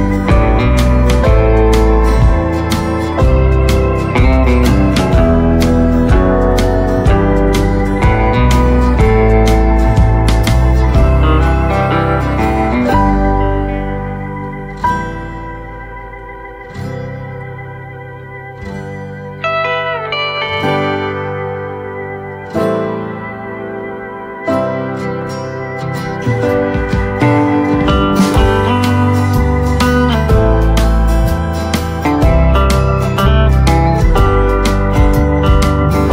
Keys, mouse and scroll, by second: 1.1 right click, 1.5 scroll down 1, 2.8 shift+right click, 4.3 scroll down 1, 5.9 click, 8.2 right click, 8.9 scroll up 1, 10.2 click, 10.7-11.1 scroll down 1, 11.1 right click, 12.0 scroll up 1, 12.9 click, 14.9 right click, 15.7 click, 16.9 right click, 17.8 scroll up 1, 18.7 click, 23.8-26.5 right drag, 26.5 click, 27.6 right click, 28.4-28.8 scroll up 1, 29.5 shift+click.